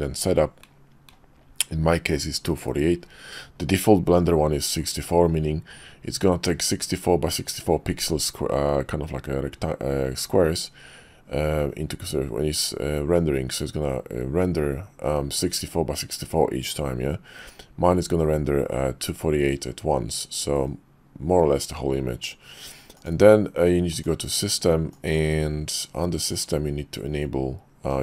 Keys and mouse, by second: 23.0-24.1 drag.